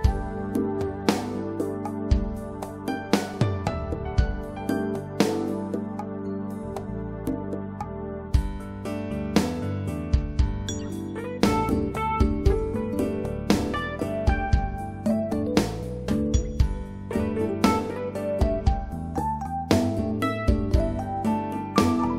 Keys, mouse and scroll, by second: 0.5 click, 4.4 click, 12.8 click, 14.4 right click, 14.7 click, 21.2 click.